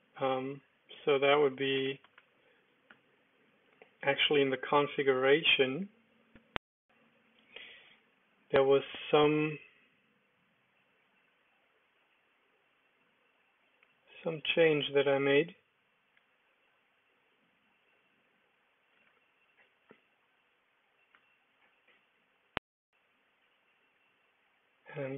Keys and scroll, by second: 1.2-4.2 typing, 8.7-9.8 typing, 21.1 ctrl+d.